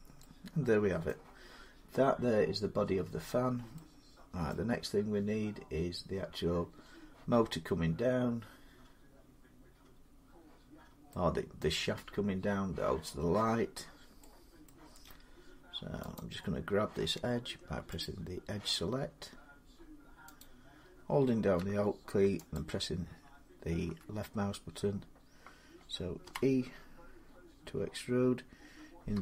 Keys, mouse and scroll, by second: 0.9 middle click, 3.1 scroll up 1, 4.5 scroll down 1, 11.4 middle click, 11.5-12.7 scroll, 13.6 scroll up 3, 13.7 scroll down 2, 16.0 click, 16.0-16.8 scroll, 17.8 click, 20.2 click, 22.4 alt+click, 26.0 e, 29.0 z.